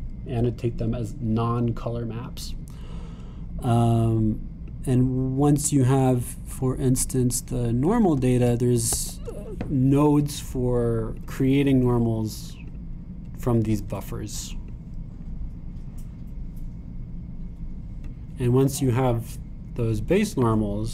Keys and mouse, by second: 9.9 shift+a, 15.7-19.6 drag, 19.6-20.7 middle drag, 20.7 click.